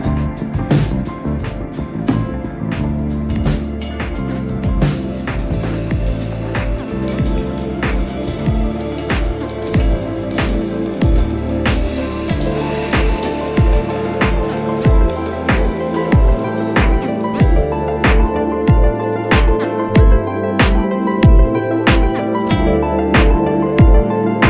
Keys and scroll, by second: 0.2 space, 3.5 space, 4.7 e, 5.3 x, 5.5 space, 7.2 space, 8.4 ctrl+z, 9.3 space, 9.8 ctrl+z, 9.9 ctrl+space, 14.0 b, 15.5-16.6 typing, 20.0 space, 20.2 r, 21.0 ctrl+z, 22.0 space, 23.1 space, 23.9 Escape.